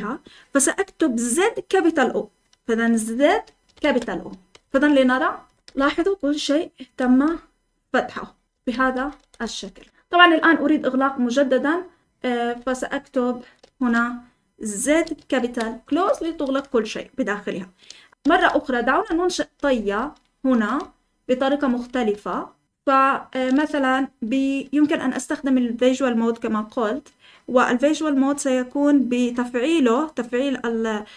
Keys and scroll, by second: 3.2 z, 3.7 shift+o, 4.5 Escape, 4.8-10.4 typing, 12.6-16.0 typing, 15.8 Escape, 17.8-23.7 typing.